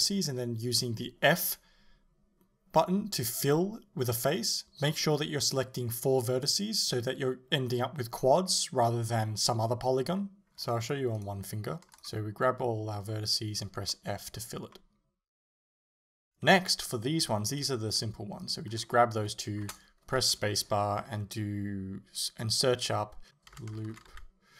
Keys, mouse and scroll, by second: 0.5 f, 1.7 right click, 2.2 shift+right click, 2.7 shift+right click, 3.0 shift+right click, 3.5 f, 3.8 middle click, 4.3 right click, 4.6 middle click, 5.1 shift+right click, 5.5 shift+right click, 6.2 shift+right click, 6.7 f, 7.0 middle click, 7.8 right click, 8.3 shift+right click, 9.0 shift+right click, 9.4 shift+right click, 10.1 shift+right click, 10.6 shift+right click, 11.2 f, 12.8-17.5 middle drag, 17.5 alt+right click, 18.4 alt+shift+right click, 18.9-24.5 middle drag, 19.7 space.